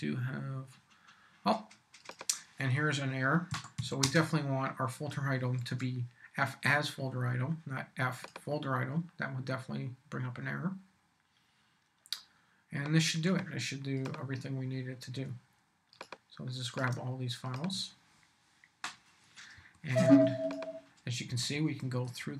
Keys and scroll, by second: 3.5 a, 3.8 s, 4.0 space, 5.6 super+s, 19.5 Down, 21.3 Down.